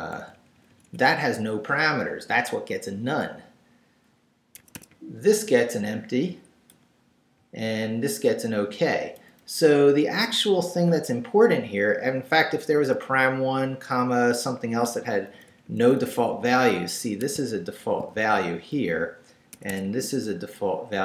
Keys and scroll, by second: 0.2 v, 0.3 Right, 4.6 Escape, 4.9 Right, 6.3 Right, 6.7 Left, 7.4 Right, 9.1 Left, 12.5 Right, 14.6 Right, 14.8 Left, 15.3 Right, 17.3 shift+Right, 18.1 shift+v, 18.5 Right, 19.5 Escape, 19.8 Right.